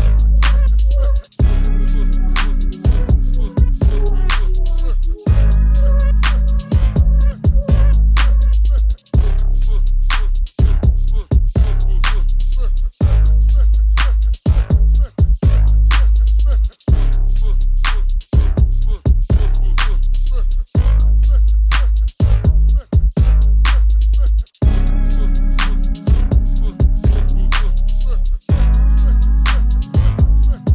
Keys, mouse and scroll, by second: 29.0 KP_0.